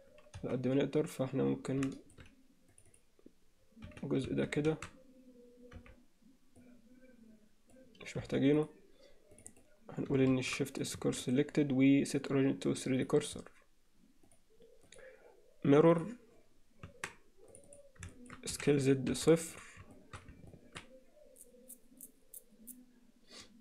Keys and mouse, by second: 0.4 z, 2.0 alt+shift+click, 2.9 click, 4.3 z, 4.3 a, 5.8 b, 8.3 x, 9.3 click, 10.3 shift+s, 11.0 Tab, 11.3-13.1 right drag, 14.3 drag, 15.0-16.1 drag, 16.9 Tab, 17.5 click, 17.7 click, 18.1 alt+shift+middle click, 18.5 s, 19.9 shift+middle click, 20.5 ctrl+middle click.